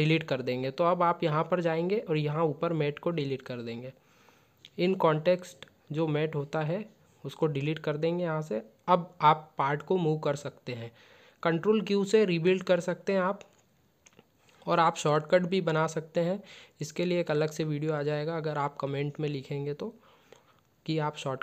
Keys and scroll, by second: 9.6 ctrl+q, 11.1 shift+c.